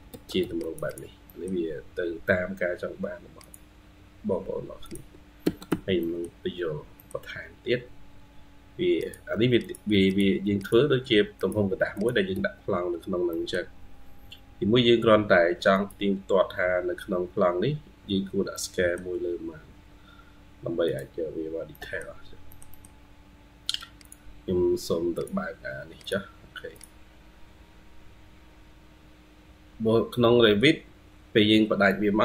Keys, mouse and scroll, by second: 0.0 Escape, 0.2 Escape, 0.7 double click, 1.1 middle click, 2.0-3.0 scroll up 1, 5.3 Escape, 5.5 Escape, 5.8 middle click, 6.6 scroll down 1, 6.8 middle click, 9.9 double click, 10.4 double click, 10.9 Escape, 12.2 Escape, 13.1 middle click, 16.6-17.4 scroll up 2, 17.4-18.4 scroll up 6, 18.4 middle click, 19.6-20.1 scroll down 2, 21.6 middle click, 22.4 middle click, 22.5 middle click, 30.6 scroll down 2, 30.9 scroll up 1, 31.0-31.7 scroll down 10, 31.7 middle click.